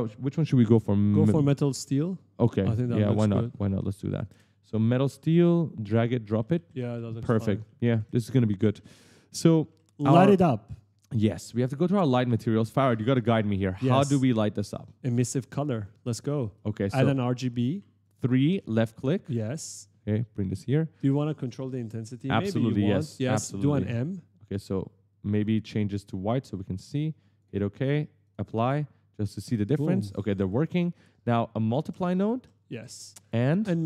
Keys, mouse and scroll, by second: 2.5-3.7 typing, 2.7 right click, 4.1 ctrl+space, 4.9 click, 6.0-9.2 typing, 6.1 right click, 9.9 ctrl+space, 11.4 click, 12.8 click, 12.9 click, 13.7 right click, 14.6 right click, 15.6 right click, 16.2 right click, 17.8 click, 18.7 click, 19.5 click.